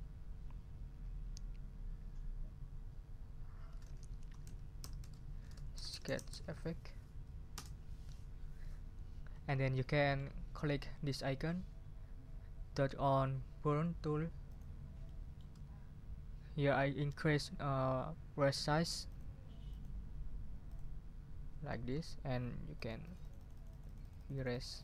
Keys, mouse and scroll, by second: 3.4-7.0 typing, 7.5 Return, 9.3-10.4 scroll up 2, 14.4 click, 15.1 middle click, 19.1 click, 19.7 click, 20.6 click, 21.7 middle click, 22.7-24.8 drag.